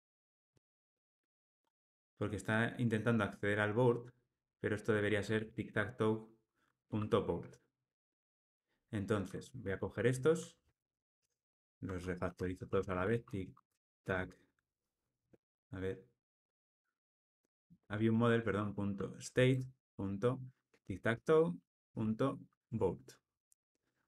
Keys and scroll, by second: 9.2 alt+shift+Right, 9.8 alt+shift+Left, 10.7 ctrl+g, 17.0 ctrl+space, 19.5 ctrl+space, 22.6 Tab.